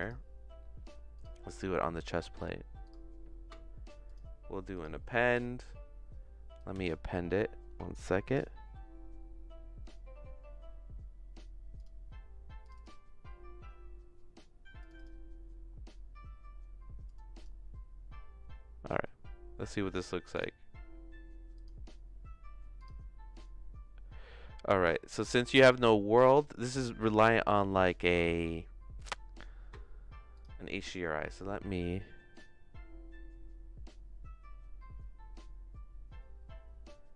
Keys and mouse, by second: 0.0 click, 1.2 click, 2.8 click, 4.0 click, 20.3 click, 21.6 click, 25.6 click, 27.7 middle click, 31.3-37.1 drag.